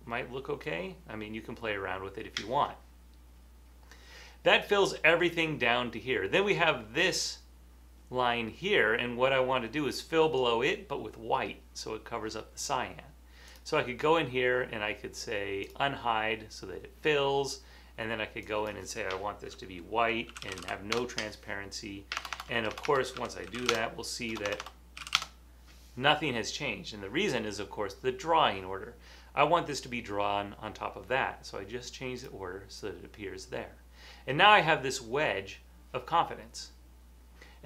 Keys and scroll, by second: 0.0-1.6 typing, 20.2-21.1 typing, 22.2-25.5 typing, 27.9-28.7 typing.